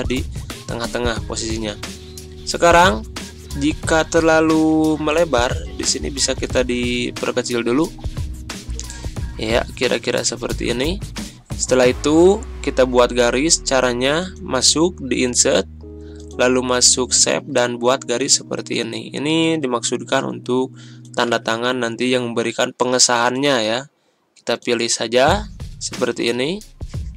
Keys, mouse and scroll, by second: 1.7-2.9 drag, 9.7-10.6 drag, 19.7-27.1 drag.